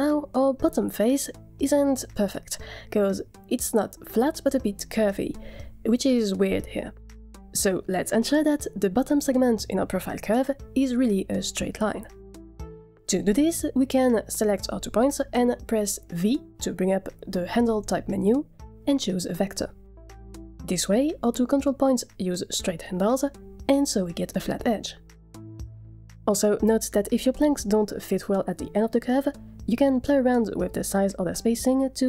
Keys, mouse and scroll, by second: 1.2 click, 3.1 click, 4.0-4.6 scroll up 3, 4.8-5.7 shift+middle drag, 7.9 click, 9.3 click, 14.2 Tab, 16.5 v, 23.7 Tab, 27.0 click, 27.0 scroll up 3, 27.2 middle drag, 27.5 shift+middle drag, 27.7 middle click, 30.4 shift+middle click, 30.5 Tab, 30.9 a, 31.6 s.